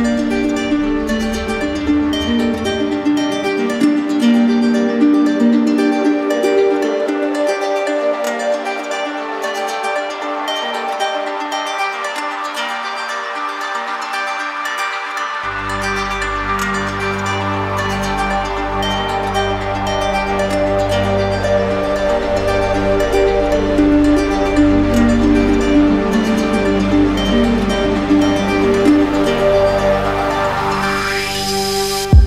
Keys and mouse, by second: 1.9 click, 3.6 click, 5.6 click, 6.5 click, 12.3 click, 13.5 z, 14.8 click, 16.5-17.6 drag, 17.7-18.8 drag, 19.0-20.1 drag, 22.0 click, 23.5 click, 25.0 click.